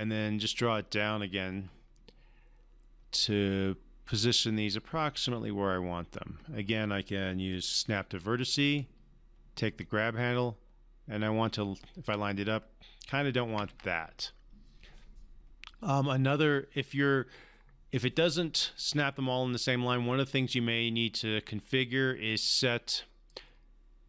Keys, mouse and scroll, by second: 4.1-7.5 drag, 8.7-12.3 typing, 9.8 click, 13.4 typing, 13.5 ctrl+z, 16.3 click, 21.2-23.3 drag.